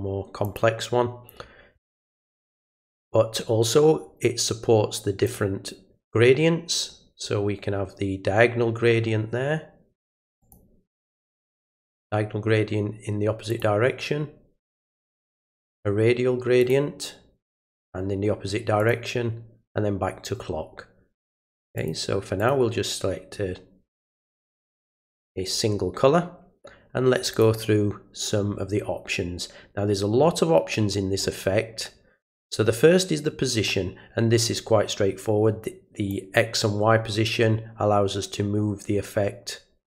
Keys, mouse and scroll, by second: 0.4 click, 5.2 click, 10.4 click, 13.5 click, 16.6 click, 18.8 click, 21.2 click, 21.7 click, 22.4 click, 24.7 click, 27.3 click, 36.1-40.0 drag.